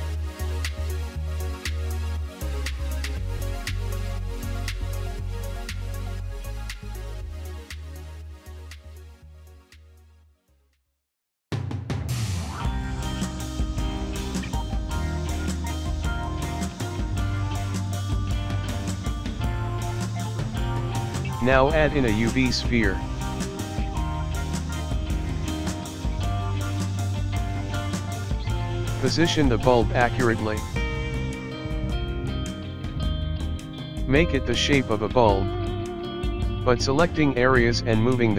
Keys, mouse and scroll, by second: 0.6 scroll up 2, 0.7 ctrl+r, 1.7 ctrl+r, 2.7 ctrl+r, 4.3-4.6 scroll up 1, 4.6-5.0 scroll down 1, 4.6 g, 7.4-8.0 scroll up 1, 8.4 alt+click, 9.5 s, 11.8 s, 12.5 middle click, 12.5 ctrl+z, 12.7 ctrl+z, 12.8 ctrl+z, 13.9 alt+shift+click, 14.3 s, 17.2 ctrl+r, 18.7 ctrl+r, 19.8-21.0 scroll down 8, 19.9 middle click, 20.3 click, 20.5 middle click, 20.9 middle click, 21.0 shift+a, 22.7 g, 23.3 s, 24.8 click, 25.3 middle click, 25.3-25.7 scroll up 2, 25.9 scroll up 2, 26.5 click, 26.7-27.3 scroll down 1, 27.3 right click, 28.0 click, 28.4 click, 28.6 right click, 28.9 click, 29.3 click, 29.6 Tab, 29.8 click, 30.1-30.7 scroll down 8, 30.7 KP_0, 31.5 scroll up 3, 31.9 click, 32.3 Tab, 32.9 KP_1, 33.0-33.5 scroll up 9, 33.5 scroll down 1, 33.7 click, 34.6 click, 35.1-35.5 scroll down 2, 35.5 click, 36.2 g, 37.5 click.